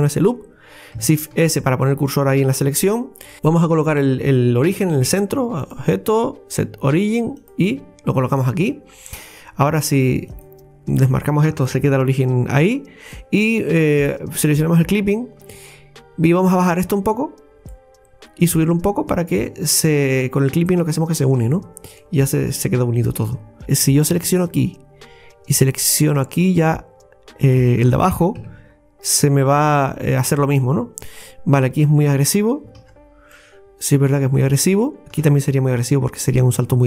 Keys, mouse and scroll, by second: 1.4 shift+s, 3.0-3.3 scroll up 1, 3.3 middle click, 4.7 Tab, 5.6-8.6 drag, 8.6 scroll down 2, 10.3 click, 12.7 scroll up 2, 13.2-14.7 middle drag, 14.7 click, 15.5 Tab, 16.8-21.5 drag, 21.5 Tab, 21.8 scroll down 1, 22.0-23.6 middle drag, 23.6 scroll down 2, 24.3 alt+shift+right click, 27.5 alt+shift+right click, 28.4 x, 31.2-32.8 middle drag, 32.8 ctrl+z, 33.3-35.0 middle drag.